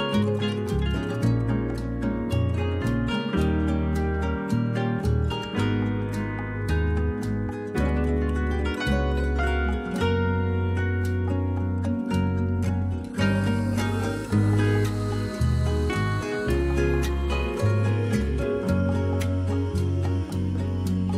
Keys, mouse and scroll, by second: 3.2-5.1 drag, 16.9-19.2 drag.